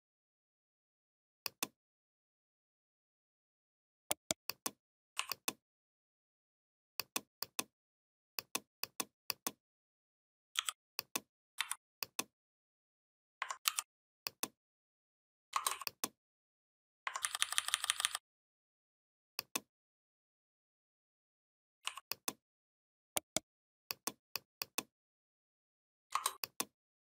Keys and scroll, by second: 10.4 i, 11.4 v, 13.4 ctrl+g, 17.0 ctrl+[.